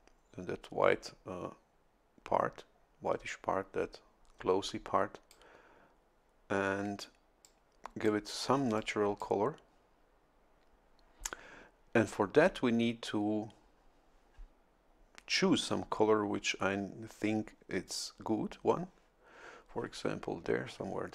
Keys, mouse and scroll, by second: 4.6-5.7 drag, 7.4 click, 8.7 click.